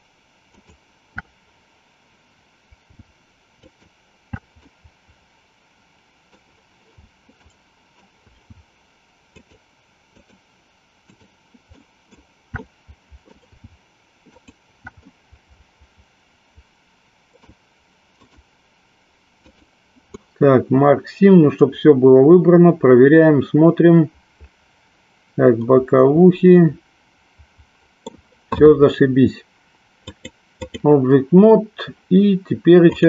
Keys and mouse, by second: 0.6 alt+shift+click, 3.4 alt+shift+click, 4.8-6.4 middle drag, 7.4 middle click, 9.2 alt+shift+click, 10.9 alt+shift+click, 11.8 alt+shift+middle click, 12.4-13.4 middle drag, 14.3 alt+shift+click, 15.2-17.6 middle drag, 18.1-19.7 right drag, 20.2-28.1 middle drag, 30.1 click, 32.9 click.